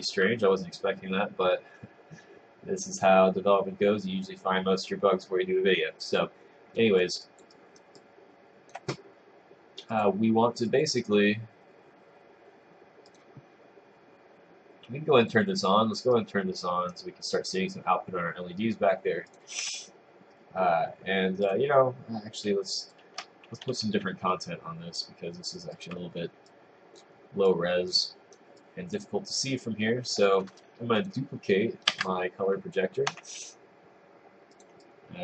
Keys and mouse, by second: 7.5 click, 7.6 right click, 8.0 click, 10.0 click, 10.7 click, 13.3 click, 19.4 click, 21.6 click, 22.7 click, 23.7 w, 25.8 click, 26.5 click, 27.5 click, 28.0 right click, 28.6 click, 31.2 click, 31.9 ctrl+d, 33.2 y, 34.6 click.